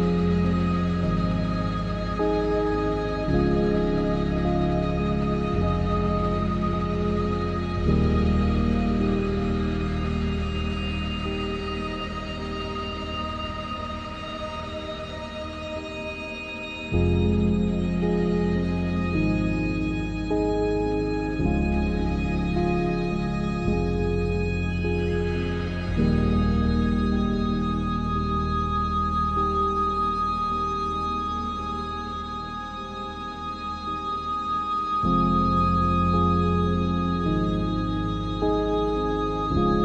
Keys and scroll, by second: 39.3 ctrl+g.